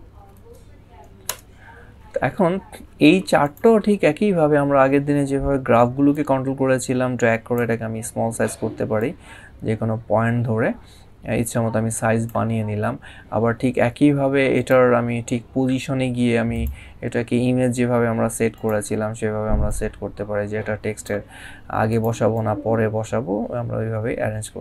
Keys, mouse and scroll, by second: 3.2 click, 3.7 scroll up 1, 5.9 click, 8.8 click, 14.3 click, 16.3 click, 18.3 click.